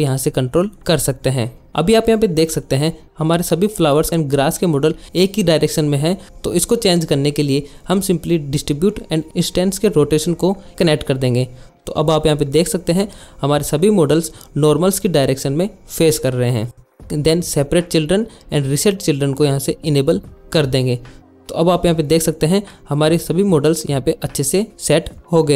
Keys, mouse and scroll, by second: 0.1-1.1 drag, 7.2 drag, 8.3-9.9 middle drag, 10.9 middle click, 11.8 KP_1, 19.6 click, 20.4 click, 21.7 click, 22.1 shift+middle click, 22.3 shift+click, 22.3 shift+middle click, 22.4 shift+middle click, 22.6 shift+middle click, 24.6-25.0 middle drag, 25.4 middle click.